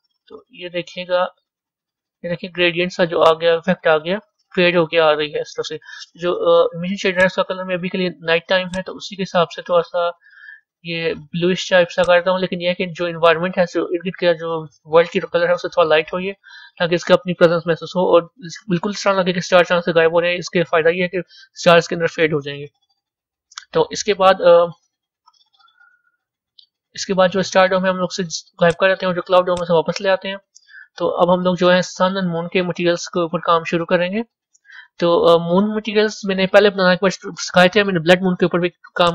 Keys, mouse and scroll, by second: 3.8-8.5 middle drag, 8.5 click, 17.2-18.3 middle drag, 18.3-19.1 scroll down 1, 19.1-20.5 scroll up 1, 20.5-24.0 scroll up 1, 24.0 a, 25.3-28.6 middle drag, 28.6 click, 29.6 click, 30.4 scroll up 3, 31.1-39.1 middle drag.